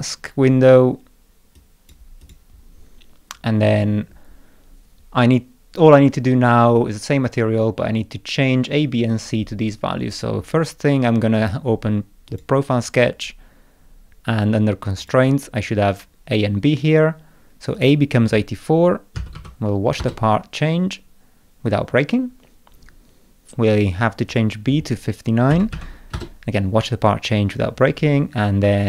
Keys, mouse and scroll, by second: 1.6 click, 2.2 click, 11.4 click, 12.3 click, 14.2 scroll down 2, 15.0 click, 15.4 scroll down 2, 17.8 click, 24.3 click.